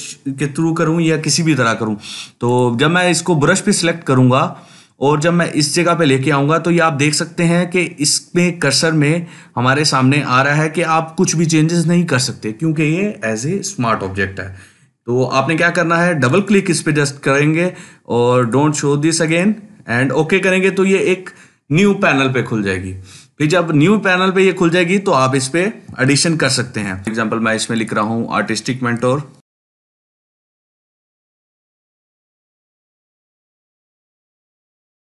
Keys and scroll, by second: 25.9 ctrl+z, 26.7 ctrl+space, 29.0-34.6 typing.